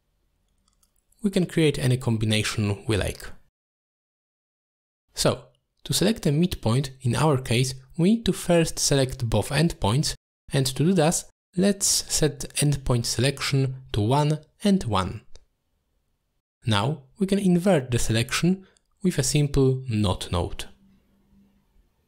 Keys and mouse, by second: 2.9-4.2 middle drag, 5.7 middle click, 6.5-6.8 middle drag, 8.0-8.3 drag, 9.7-11.6 drag, 13.0 click, 15.5-16.6 drag, 17.9-19.6 shift+drag, 20.6-22.0 drag.